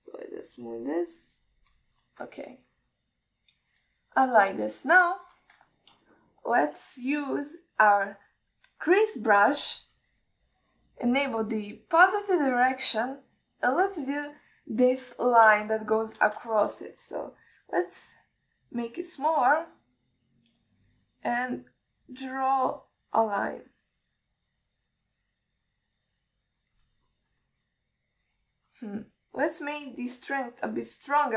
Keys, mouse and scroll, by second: 1.0-2.9 shift+drag, 3.6-5.0 ctrl+middle drag, 5.8 alt+middle click, 6.3 alt+shift+middle click, 6.9 ctrl+middle click, 9.4 click, 10.8 click, 17.1 alt+shift+middle click, 17.8 ctrl+alt+middle click, 18.8 f, 23.0-28.0 drag, 28.3-30.0 middle drag, 30.4 ctrl+y.